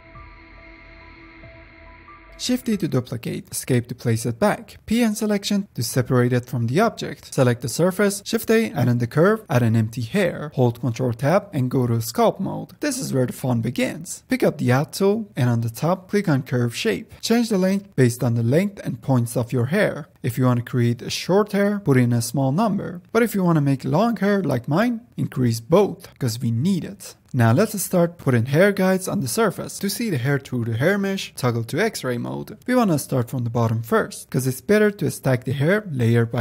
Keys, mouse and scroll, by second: 0.1 middle click, 0.9 shift+click, 1.0 shift+scroll up 1, 1.1 middle click, 1.6 shift+click, 1.9 middle click, 2.7 shift+d, 5.7 p, 7.7 click, 8.2-8.5 middle drag, 8.5 scroll up 1, 8.8 shift+a, 10.8 scroll up 2, 10.9 ctrl+Tab, 12.8-14.8 shift+middle drag, 14.8-15.8 drag, 16.0 ctrl+Tab, 16.3-21.3 drag, 27.7-28.9 shift+middle drag, 28.9-29.5 drag, 29.5-29.9 middle drag, 29.9 f, 30.6 f, 31.2-31.7 drag, 31.7-33.7 middle drag, 33.7-35.5 scroll down 3, 33.8-34.2 middle drag, 35.5 click, 35.9 g, 36.0 f.